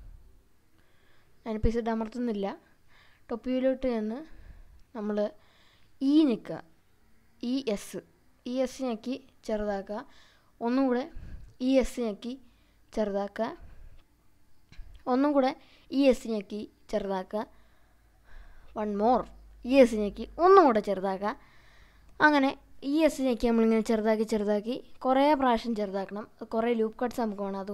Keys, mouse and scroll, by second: 3.9 click, 5.1-5.6 scroll up 2, 6.6 e, 7.1 s, 9.8 click, 11.8 e, 12.1 s, 14.8 click, 15.9 e, 16.3 s, 19.2 click, 19.9 e, 20.3 s, 22.4 click, 23.1 e, 23.5 s, 25.2 click, 25.7 e, 26.1 s, 27.4 click.